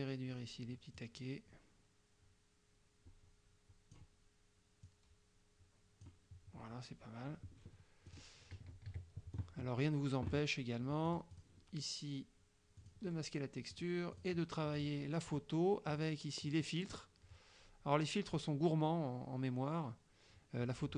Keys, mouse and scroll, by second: 1.0-4.2 drag, 4.9-6.3 drag, 8.2 click, 9.0 KP_Subtract, 11.1 click, 12.8 click, 13.8 click, 14.2 click, 14.8 click, 16.0 click.